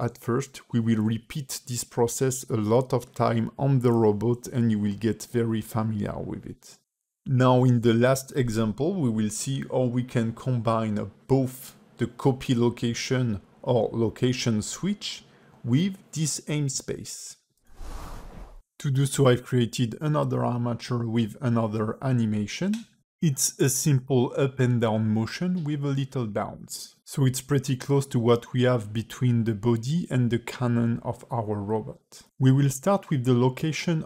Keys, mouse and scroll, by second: 0.1 click, 0.8 shift+d, 2.7 click, 3.2 a, 3.3 a, 3.5 click, 4.3 shift+d, 5.8 click, 6.5 x, 7.1 click, 7.5 click, 7.7 space, 9.3 space, 9.7 click, 12.6 click, 13.3 x, 13.9 click, 14.2 space, 14.8 space, 14.8 click, 16.9 click, 17.8 click, 18.2 x, 18.5 click, 18.5 space, 19.0 click, 19.7 space, 24.7 space, 25.3 click, 26.3 click, 27.6 click, 29.9 click.